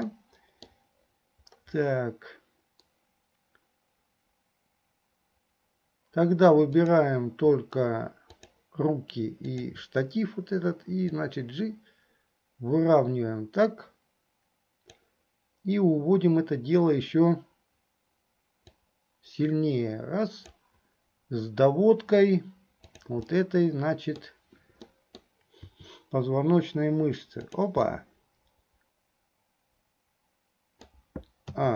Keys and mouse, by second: 0.3 click, 0.3 right click, 6.9 click, 8.3 shift+click, 9.6 shift+click, 11.5-15.5 drag, 18.8-20.9 drag, 22.9 click, 23.5 middle click, 25.1 middle click, 25.8 r, 28.1-31.1 drag, 28.1-31.1 right drag.